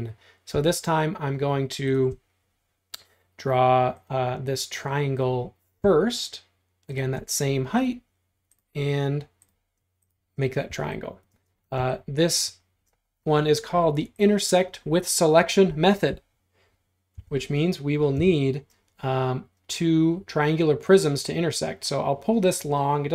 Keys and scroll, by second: 10.7 e, 11.4 space, 17.2 m, 18.2 p.